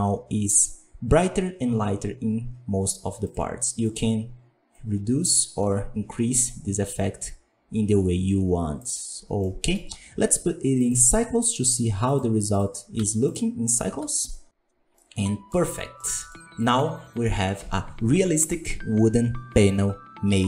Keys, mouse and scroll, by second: 3.3-4.7 drag, 9.1 scroll down 1, 9.4-11.4 middle drag, 11.4-13.2 drag, 13.2 z, 14.3 z, 14.9-15.5 middle drag, 15.5-15.9 scroll up 1, 15.9-16.2 middle drag, 16.2 scroll up 2.